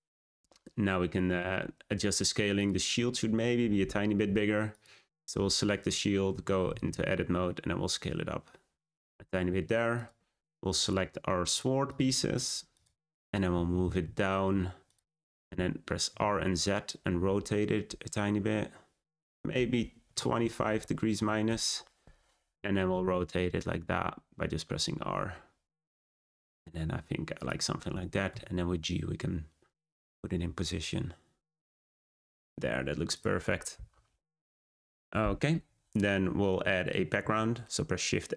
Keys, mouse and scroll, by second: 2.5 click, 4.6 shift+click, 6.2 Tab, 6.5 a, 6.7 s, 9.0 Tab, 9.9 click, 10.7 shift+click, 11.4 shift+click, 11.8 shift+click, 12.3 shift+click, 12.7 shift+click, 13.5 g, 16.0 r, 22.8 r, 28.2 g, 33.1 click, 34.2-36.5 scroll up 1, 36.5-37.1 scroll down 1, 37.1 shift+a.